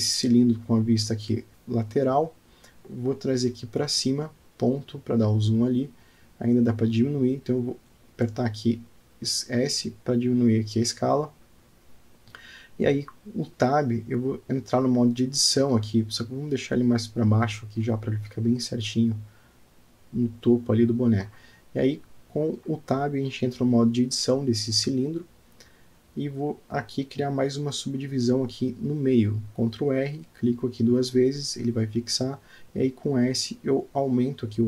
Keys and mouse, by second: 4.0 KP_Decimal, 4.8-5.9 middle drag, 6.1 s, 6.2 click, 6.5 click, 7.2 s, 9.9 click, 10.4 click, 11.7-13.4 middle drag, 13.9 alt+middle click, 15.5 g, 18.1 KP_Decimal, 19.2-20.0 middle drag, 23.9 ctrl+r, 24.5 click, 25.0 click, 25.6 Tab, 26.8 ctrl+r.